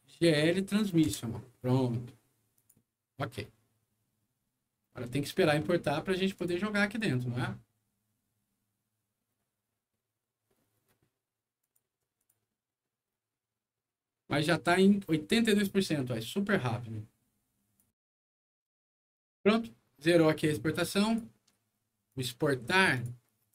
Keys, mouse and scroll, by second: 1.0 Return, 2.5 click, 6.3 click, 11.5 click, 12.1 click, 17.7 click, 19.0 click, 21.0 click, 22.1 click, 22.9 click.